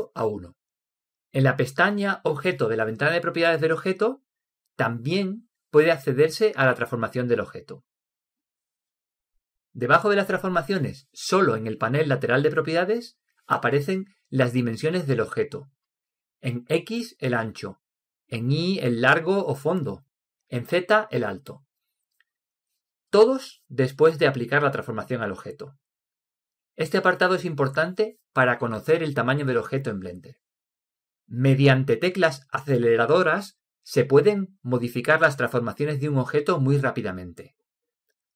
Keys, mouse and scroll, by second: 4.8 click.